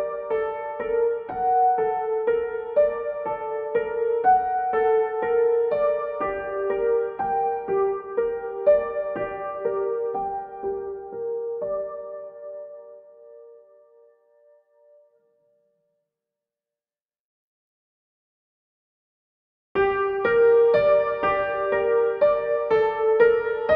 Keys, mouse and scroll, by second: 2.1-10.1 drag, 11.6 click, 16.8 click, 20.5 click, 23.1-23.7 drag.